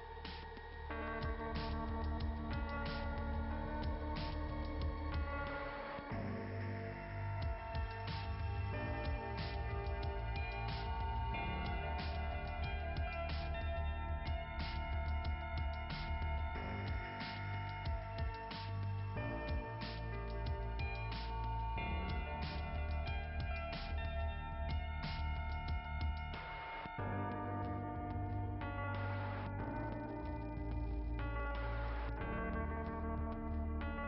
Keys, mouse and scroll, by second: 0.0-0.4 typing, 2.2 click, 4.9 click, 9.3 ], 10.6 click, 14.4 click, 15.2 click, 18.9 click, 21.2 click, 26.3-28.6 typing, 28.7 click, 28.9 click, 29.2 click, 33.6 scroll up 2.